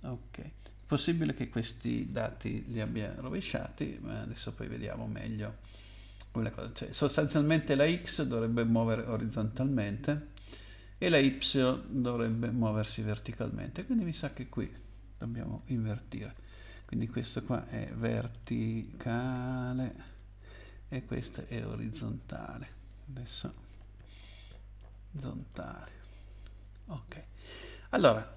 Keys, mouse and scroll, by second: 0.1 click, 14.1 click, 15.5 shift+Right, 16.0 shift+Right, 16.1 shift+Right, 16.2 shift+Right, 16.3 shift+Right, 16.5 shift+Right, 17.6-20.4 typing, 21.5 click, 23.2-26.1 typing, 26.9 click.